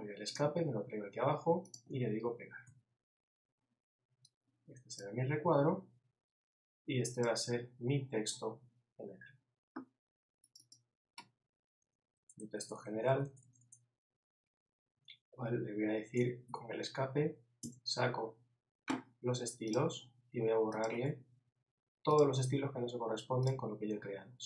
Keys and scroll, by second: 2.7 super+v, 16.5 super+z.